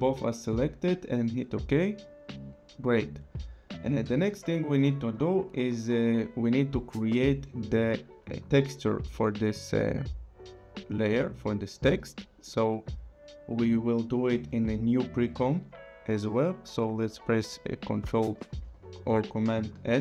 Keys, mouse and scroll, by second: 1.3 click, 4.9 click, 12.4 click, 18.5 ctrl+n.